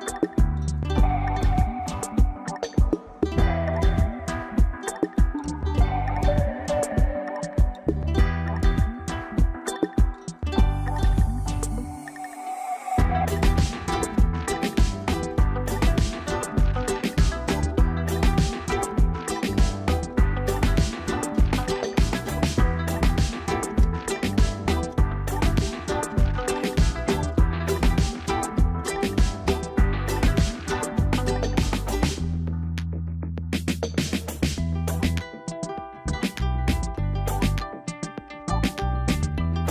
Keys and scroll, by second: 4.7 ctrl+l, 11.3 ctrl+j, 35.9 ctrl+alt+shift+e.